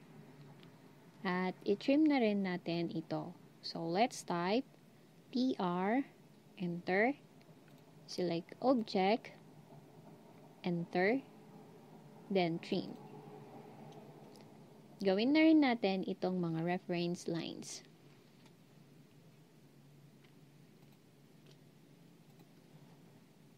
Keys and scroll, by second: 5.2-5.9 typing, 11.0 Return.